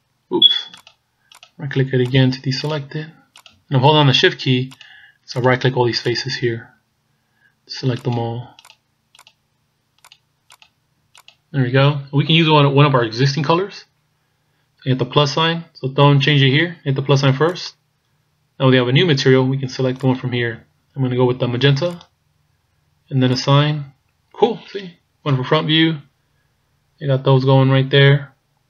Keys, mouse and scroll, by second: 4.8 shift+right click, 5.5 shift+right click, 6.2 shift+right click, 8.0 shift+right click, 8.7 shift+right click, 9.3 shift+right click, 10.1 shift+right click, 10.6 shift+right click, 11.2 shift+right click, 17.6 click, 20.0 click, 23.4 click, 25.3 KP_1, 26.2 scroll down 3.